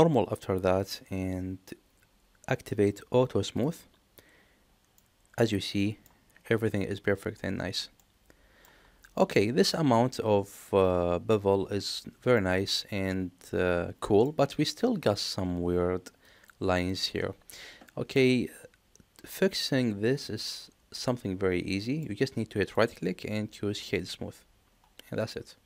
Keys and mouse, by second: 0.6 click, 3.4 click, 4.9-6.0 middle drag, 7.9-8.5 middle drag, 9.1-11.2 middle drag, 12.3-14.1 middle drag, 18.0-21.9 middle drag, 22.6-24.0 right drag, 25.2-25.6 middle drag.